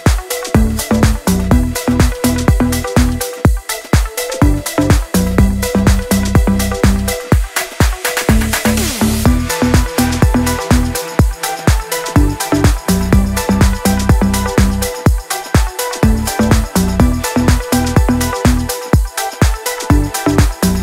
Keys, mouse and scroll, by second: 0.0-1.9 typing, 3.0 click, 4.5 c, 4.9 click, 7.9-10.5 scroll down 1, 11.1-17.5 drag, 18.7 click.